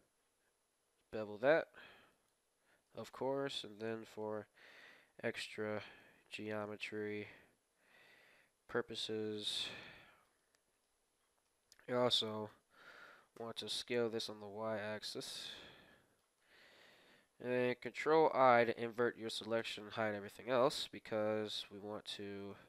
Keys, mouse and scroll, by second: 2.5-4.8 middle drag, 3.7 ctrl+r, 5.9-7.7 drag, 6.8 shift+s, 8.5 shift+s, 8.8 ctrl+r, 9.7-11.9 middle drag, 11.5 ctrl+l, 12.5 KP_7, 13.3 s, 15.5-18.0 middle drag, 17.9 ctrl+i, 19.6 h, 20.0-22.6 middle drag, 22.0-22.6 right drag.